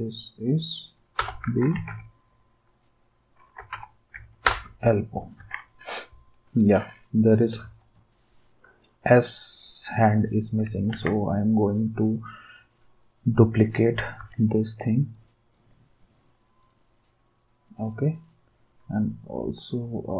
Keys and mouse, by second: 1.2 Return, 1.5-4.6 typing, 5.4 ctrl+s, 10.9 ctrl+d, 14.2 v, 15.1 d.